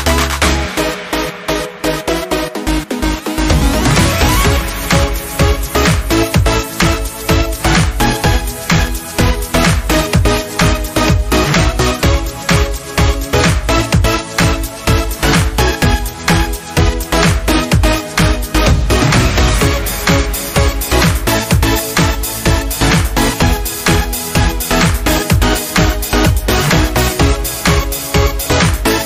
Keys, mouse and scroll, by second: 3.3 shift+Num_Lock, 3.3 click, 11.1 Escape, 14.2 Escape, 14.4 alt+scroll down 1, 15.9 space, 16.2 click, 16.3 space, 18.6 click, 23.7 click.